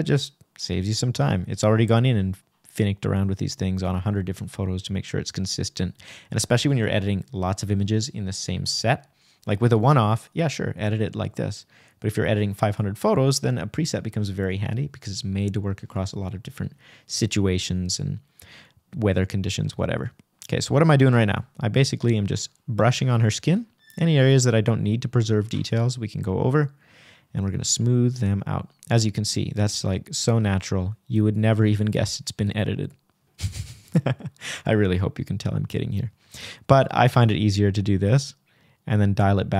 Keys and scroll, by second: 2.5 k.